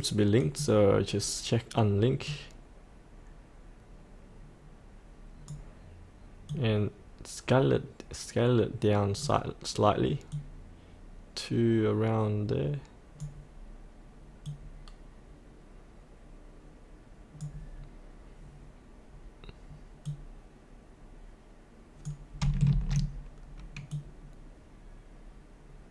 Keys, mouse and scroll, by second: 22.7 ctrl+z, 23.9-25.9 drag.